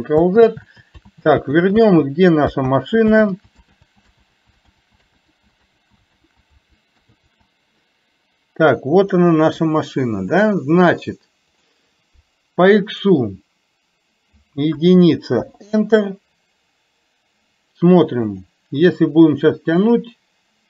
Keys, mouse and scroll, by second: 0.4 ctrl+z, 1.3 ctrl+z, 1.8 z, 2.8 ctrl+z, 3.2 ctrl+z, 3.9 ctrl+z, 4.2 ctrl+z, 4.8 ctrl+z, 5.3 ctrl+z, 5.8 ctrl+z, 6.3 ctrl+z, 7.3 ctrl+z, 10.8 click, 11.6 click, 12.9-15.4 drag, 19.9-20.6 drag.